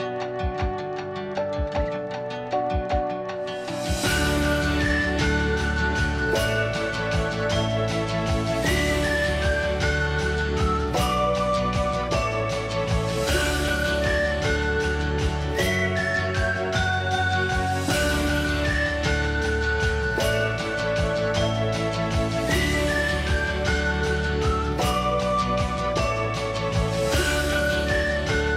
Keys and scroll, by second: 4.3 ctrl+s, 9.1-13.8 typing.